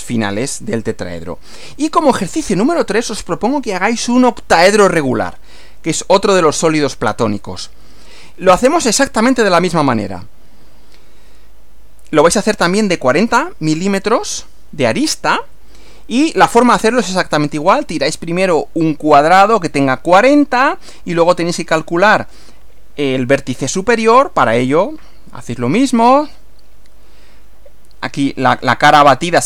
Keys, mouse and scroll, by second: 1.6 Right, 10.6 Right, 15.4 Right.